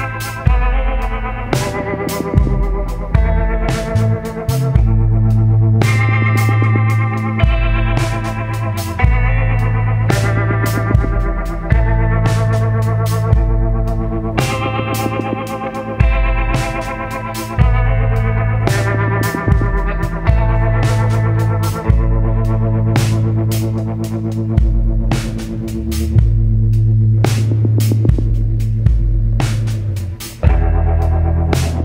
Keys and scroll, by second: 0.0 ctrl+z, 0.4 ctrl+z.